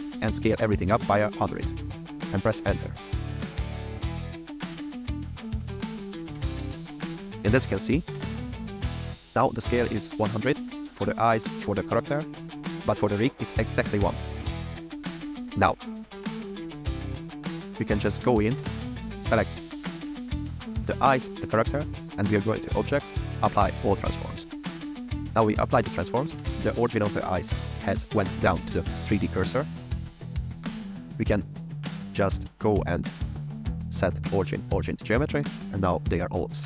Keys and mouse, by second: 0.4 KP_1, 1.0 KP_0, 1.2 KP_0, 2.7 KP_Enter, 8.3 click, 8.5 drag, 12.5 click, 15.7 click, 18.9 shift+click, 22.0-23.9 right drag, 26.5 click, 33.1-34.7 right drag.